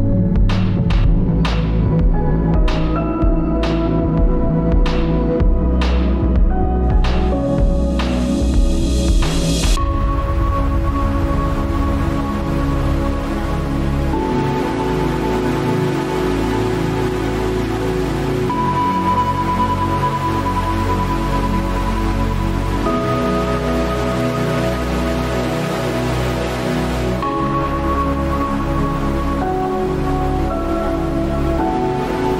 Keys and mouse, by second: 6.9 ctrl+r, 25.7-31.6 middle drag.